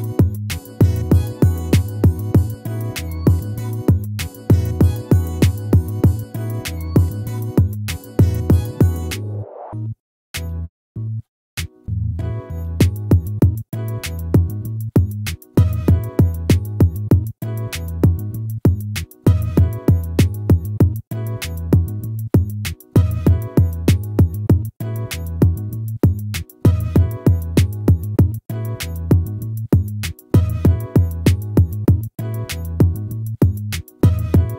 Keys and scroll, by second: 21.2 ctrl+-, 23.3 ctrl+-.